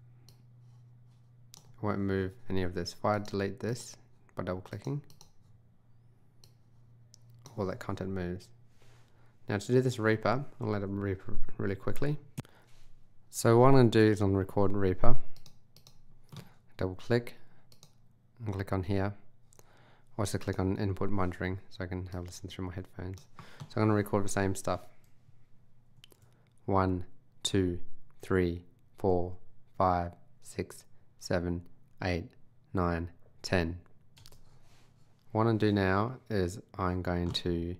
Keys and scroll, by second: 26.0 super+r, 34.3 space.